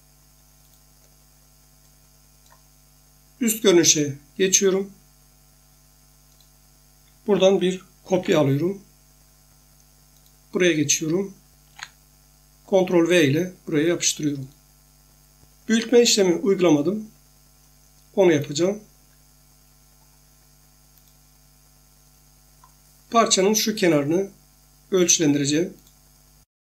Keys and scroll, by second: 8.1 ctrl+c, 11.6 ctrl+v.